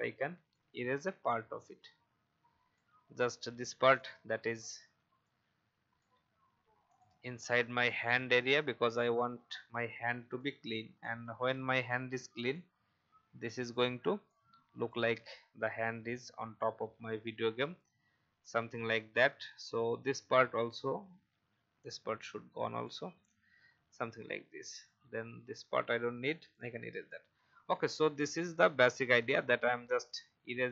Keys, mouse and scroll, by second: 0.5-2.9 drag, 3.5 v, 3.9 click, 4.8 shift+e, 5.2 click, 6.4 v, 6.8 click, 7.9 Delete, 9.1-9.8 alt+scroll down 1, 10.4 click, 10.9 alt+scroll up 1, 11.5 shift+e, 12.5-14.1 drag, 15.5 v, 15.9-17.6 alt+scroll down 1, 17.8-19.5 alt+scroll down 1, 19.8 alt+scroll up 1, 20.5 click, 21.1 shift+e, 21.8-23.2 drag, 23.2 v, 23.6-24.0 alt+scroll down 1, 24.7 click, 26.0 Delete, 28.3 alt+scroll up 1, 29.2 click, 30.6 Delete.